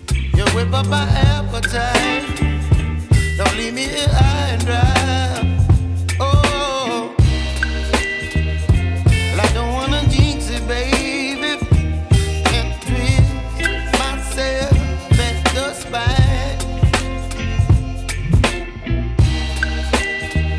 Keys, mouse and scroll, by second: 1.4-1.8 typing, 1.8 click, 1.8 click, 4.8 click, 11.8 q, 13.3 click, 15.1-15.8 typing, 17.1 click, 19.2-19.7 typing, 19.7 click.